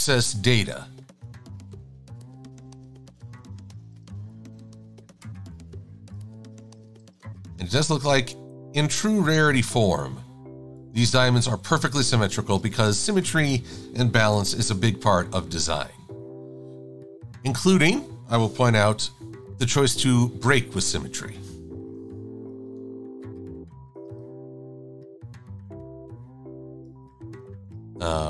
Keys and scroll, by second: 0.1 v, 3.8 v, 6.8-7.7 typing, 11.6 Up, 12.5 shift+super+a, 12.8 v, 14.3 super+g, 19.0 i, 21.9 l.